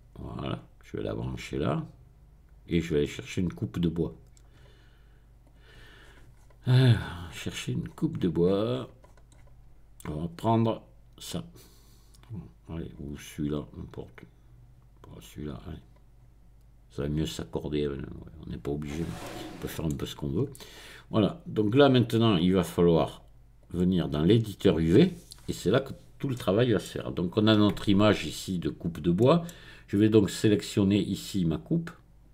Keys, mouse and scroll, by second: 0.4 click, 1.6-3.0 drag, 3.8 click, 4.3-5.4 middle drag, 5.4 click, 5.9-10.2 scroll down 1, 11.2 click, 13.1 middle click, 15.1 click, 18.1 click, 19.2-20.3 middle drag, 20.3-20.8 scroll up 1, 20.8-21.5 scroll down 1, 23.6 click, 24.6 click, 25.3-26.0 scroll down 1, 26.0 scroll down 1, 26.3 middle click, 27.7-28.2 scroll up 1, 28.2-28.9 scroll down 1, 29.1-30.7 middle drag, 30.7-32.3 drag.